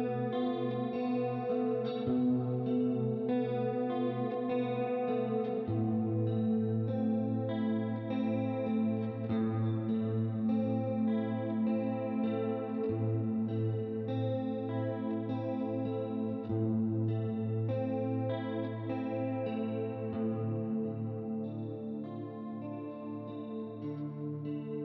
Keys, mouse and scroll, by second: 0.3 click, 1.5 right click, 2.6 click, 4.5 click, 7.3 click, 11.2 middle click, 11.9 click, 12.8 click, 13.3 shift+click, 14.2 click, 15.0 click, 15.8 click, 16.7 right click, 17.3 middle click, 18.3 click, 19.4 ctrl+d, 19.9 click, 20.9 right click, 21.9 click, 22.7 middle click, 23.3 click.